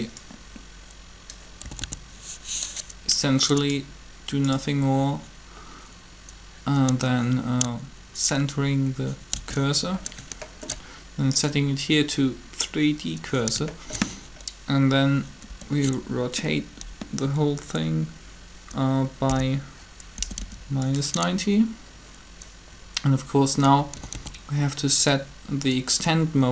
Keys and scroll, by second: 1.6 typing, 9.1 shift+c, 16.4 r, 19.0-20.2 typing, 23.6-24.4 typing.